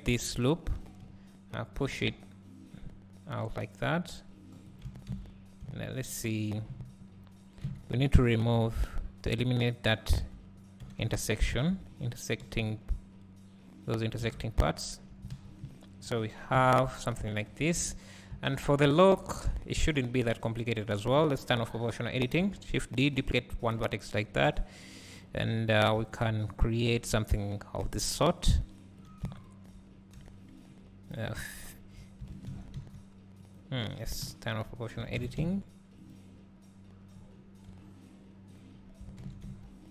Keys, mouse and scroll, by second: 0.8 KP_3, 1.9 g, 5.7 `, 7.0-7.7 scroll up 1, 8.0 `, 9.6 alt+click, 10.9 g, 14.6 scroll down 1, 15.4 alt+a, 16.6 KP_1, 20.5 click, 21.5 o, 22.4 shift+d, 29.5 shift+click, 30.2 f, 31.7 alt+click, 32.6 alt+shift+s, 34.3 o, 35.3 alt+shift+s, 36.1 right click, 39.3 alt+shift+s.